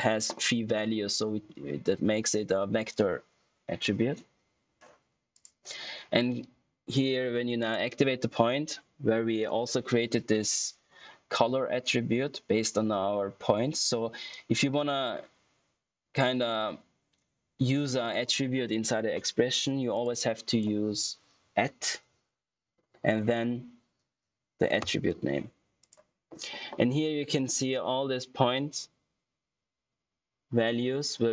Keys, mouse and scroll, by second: 5.2 click, 7.5 click, 14.2 click, 19.8 click, 21.6 ctrl+q, 24.7 shift+p, 25.7 click.